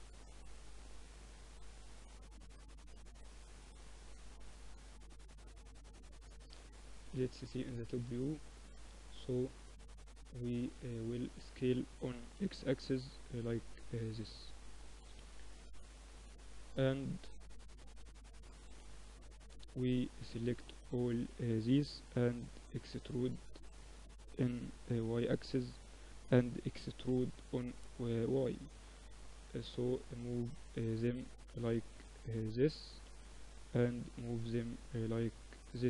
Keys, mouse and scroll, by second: 0.1-3.3 drag, 3.3 middle click, 3.7-5.4 drag, 5.3 KP_7, 5.8 middle click, 6.6 click, 7.5-9.8 middle drag, 11.1-13.5 drag, 11.1 s, 14.3 KP_3, 16.0 Tab, 16.6-18.5 drag, 16.8 a, 17.0 a, 17.5 a, 18.5-20.7 middle drag, 18.5 b, 22.0 e, 26.1 e, 28.1-29.9 drag, 31.6-33.5 drag, 32.1 a, 32.8 b, 33.5 middle click, 33.8-35.7 drag, 35.1 z, 35.7 middle click.